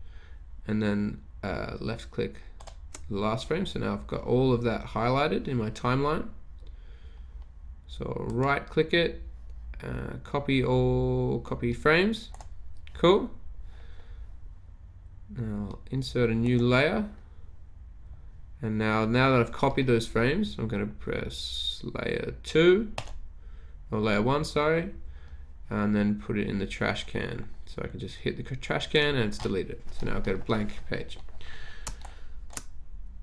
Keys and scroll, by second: 32.1 space, 32.5 space.